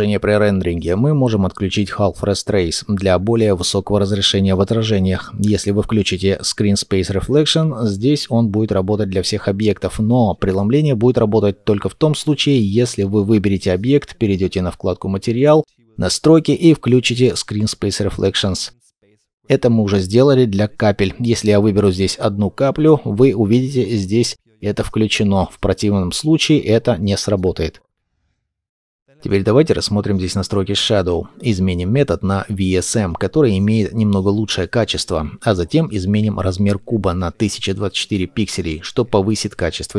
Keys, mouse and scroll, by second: 3.5-6.5 scroll down 1, 21.7-23.8 scroll down 1, 27.6-28.0 scroll up 1, 28.7 scroll up 1.